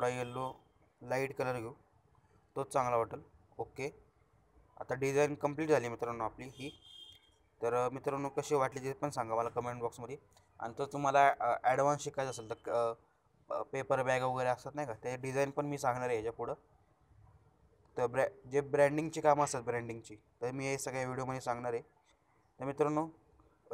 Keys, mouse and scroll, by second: 6.0 alt+shift+scroll down 2, 6.2-6.9 alt+shift+scroll up 2, 6.9 alt+shift+scroll down 2, 7.2 alt+shift+scroll up 1, 8.0-8.6 alt+shift+scroll down 1, 8.6-9.5 alt+shift+scroll up 1, 9.7 alt+shift+scroll up 1, 10.6 alt+shift+scroll down 1, 13.5-14.3 alt+shift+scroll up 2, 14.3-14.7 alt+shift+scroll up 1, 14.7 alt+shift+scroll down 1, 18.6 alt+shift+scroll down 1.